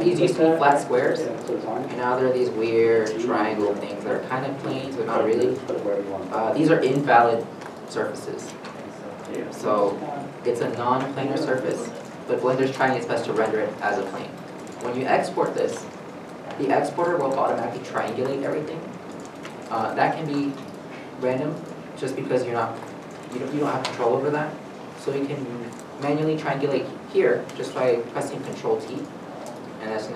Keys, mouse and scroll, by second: 2.7 ., 3.3 middle click, 5.0 scroll, 5.2 middle click, 18.9 middle click, 27.5 middle click, 27.5 a, 28.9 ctrl+t, 29.5 middle click.